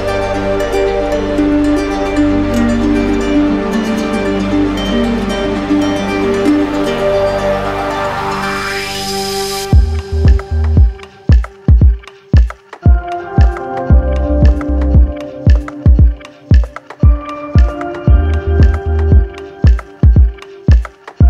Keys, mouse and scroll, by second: 0.5-4.2 drag, 1.7 right click, 5.2 shift+right click, 6.4 right click, 7.6 right click, 8.6 alt+right click, 9.2 alt+right click, 11.1-12.2 right drag, 14.0-15.0 drag, 15.4-16.5 drag, 16.8-18.6 drag, 18.6 z, 20.0 click, 21.0 click.